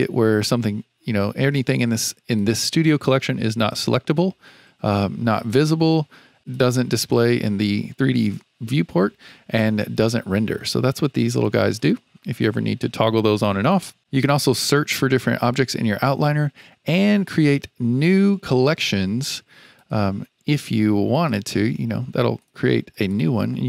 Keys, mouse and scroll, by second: 2.3 click, 3.6 click, 5.3 click, 6.5 click, 7.0 click, 9.9 click, 10.9 click, 11.3 click, 19.7 click, 21.1-22.4 drag, 22.9 click, 23.1-23.6 drag.